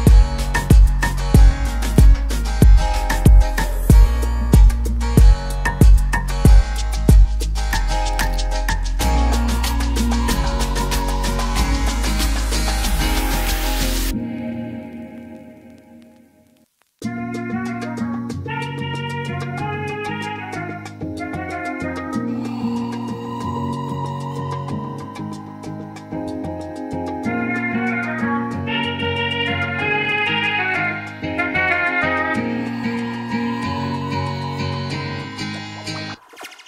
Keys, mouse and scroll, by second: 0.3 click, 5.0 click, 6.9 click, 9.0 click, 11.3 click, 13.3 click, 19.8 click, 23.0 click, 28.7 click, 31.7 click, 33.9 click, 36.4 ctrl+a.